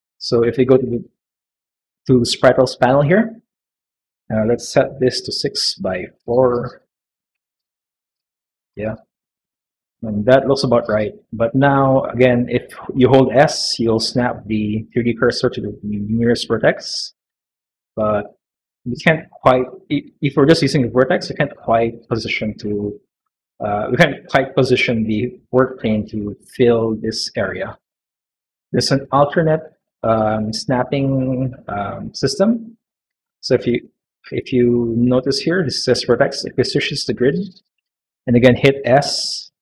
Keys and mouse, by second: 4.4-5.9 drag, 6.3-8.6 drag, 9.3 middle click, 9.8 s, 15.2 s, 30.5 s, 36.9 click, 38.4 s.